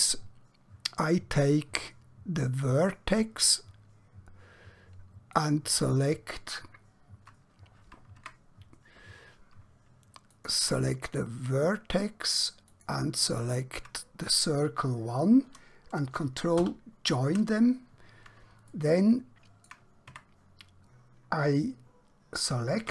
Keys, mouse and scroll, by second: 2.7 click, 5.3 shift+click, 8.3 Tab, 10.4 click, 12.7 shift+click, 16.5 ctrl+j, 18.8 shift+middle click, 20.1 Tab, 22.7 a.